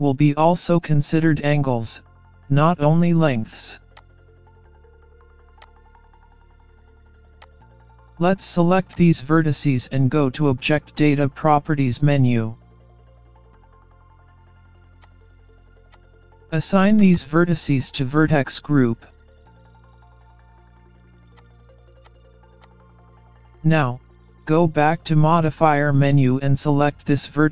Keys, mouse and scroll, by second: 1.3 click, 4.0 click, 8.9 click, 11.7 middle click, 15.0 click, 15.9 click, 17.0 click, 17.1 click, 22.0 click, 22.6 click, 25.5 click.